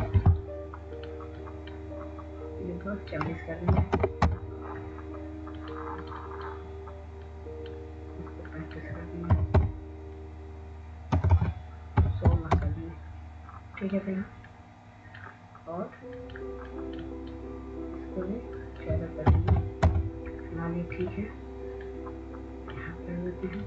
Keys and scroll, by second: 2.8 ctrl+a, 6.5 typing, 7.0 Return, 8.4 typing, 12.1 typing, 14.0-15.4 typing, 15.4 Return, 22.1 typing, 22.7 Return.